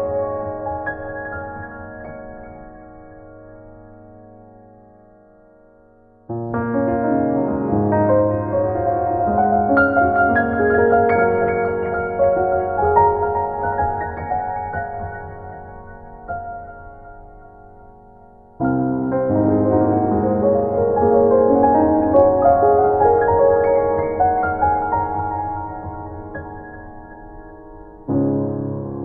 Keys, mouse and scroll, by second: 0.8-1.4 scroll down 3, 1.4 middle click, 2.3 scroll up 2, 3.0 middle click, 4.1 middle click, 4.6 middle click, 5.9 middle click, 7.0 middle click, 9.5 click, 10.2 click, 10.9 scroll down 1, 11.1 scroll up 1, 12.6-13.1 scroll down 2, 13.3 scroll up 1, 13.9 click, 20.2 KP_1, 20.9 ctrl+KP_1, 22.4 right click, 23.0-23.4 scroll up 3, 23.4 click, 24.0 click, 24.0 scroll up 1, 24.8 scroll down 4, 26.5 scroll up 2.